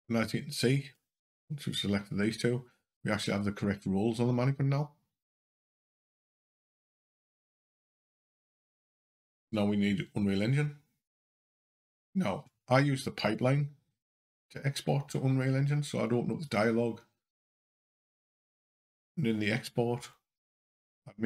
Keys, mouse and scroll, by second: 13.2 click.